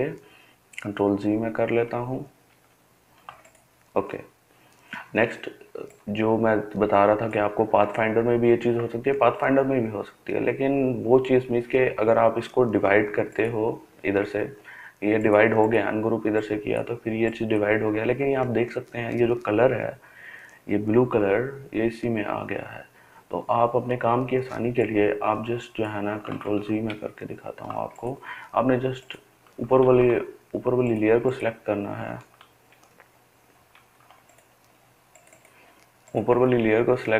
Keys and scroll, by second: 0.8 ctrl+z, 26.2 ctrl+z, 26.6 ctrl+z, 29.5 ctrl+z, 31.9 ctrl+z, 32.5 ctrl+z.